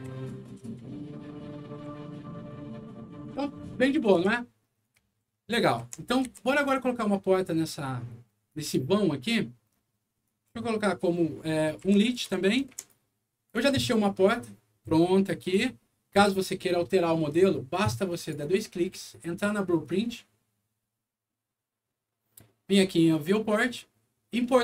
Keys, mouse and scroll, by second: 2.4 shift+right click, 4.1 Escape, 4.7-6.2 typing, 4.8-6.5 right drag, 8.4 click, 10.2 click, 11.6-13.2 typing, 11.6-12.8 right drag, 13.4 click, 14.3-15.5 drag, 18.1 click, 18.3 click, 23.1 click, 24.3 click.